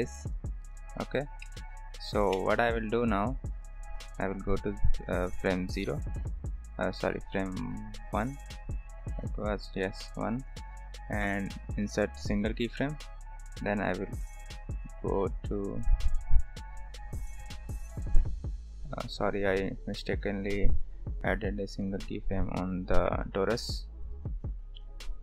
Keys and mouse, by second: 0.6-2.7 drag, 3.7-5.9 drag, 7.4-8.4 drag, 10.4 click, 11.6 click, 13.6-15.8 drag, 18.2 click, 18.8 click, 19.9-21.8 drag, 24.2-25.2 drag.